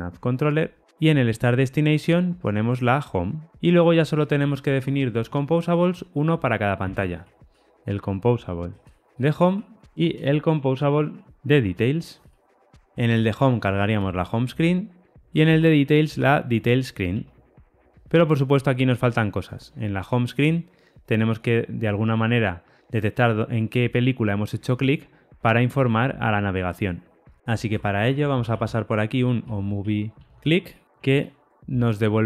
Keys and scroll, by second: 0.3 Tab, 8.3 Return, 11.3 Return, 14.0 Return, 17.1 Return, 17.9 super+[, 17.9 ctrl+alt+Left, 19.5 super+b, 30.8 Tab, 31.5 alt+super+l.